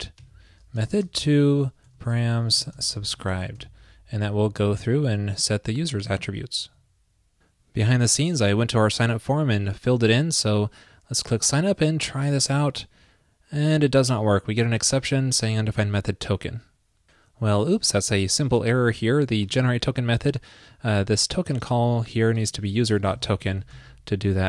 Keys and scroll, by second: 1.4 ctrl+p, 3.2 super+s, 6.1 super+s, 23.8 super+s.